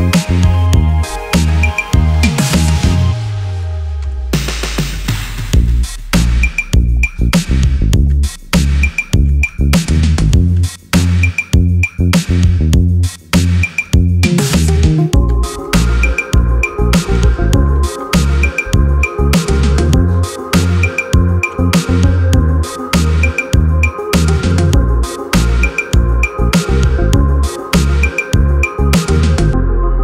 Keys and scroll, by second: 1.7-5.3 typing, 14.5 alt+shift+c, 14.9-18.5 typing, 24.5 alt+shift+space.